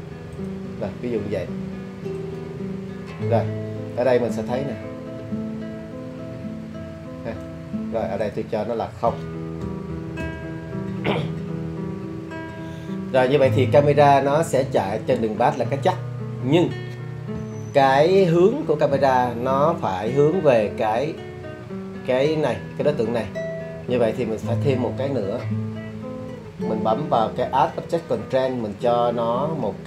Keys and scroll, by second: 9.7 0, 10.2 Return.